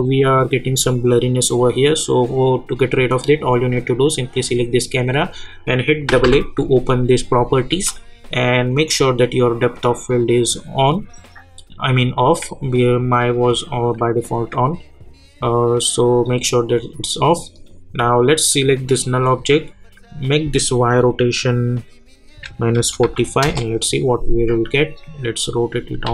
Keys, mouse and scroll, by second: 6.0 typing, 10.5 click, 17.5 click, 18.9 click, 22.3 -, 23.4 Return, 24.8 click, 26.0 ctrl+z.